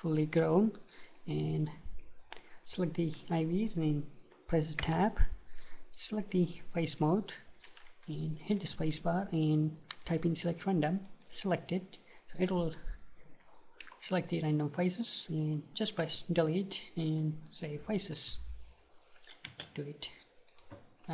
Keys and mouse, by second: 0.5-4.9 middle drag, 4.9 Tab, 8.9 space, 16.1 Delete, 19.5 space.